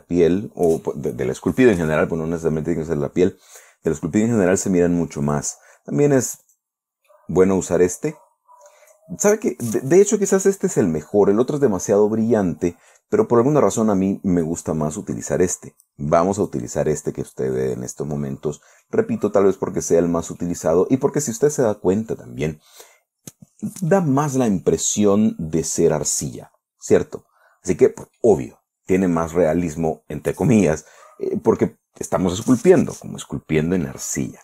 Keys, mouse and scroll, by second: 5.8 click, 6.9 click, 7.6 click, 8.4-10.4 middle drag, 10.4 scroll down 1, 10.8-13.6 middle drag, 15.1 click, 16.8 click, 18.0 scroll up 1, 18.0-19.5 middle drag, 19.6 scroll up 2, 20.4 scroll down 2, 20.8-22.8 drag, 22.8 scroll down 2, 25.4-25.8 scroll up 2, 25.8-26.6 scroll down 6, 26.6-28.8 drag, 29.0 scroll up 2, 29.4 scroll down 2.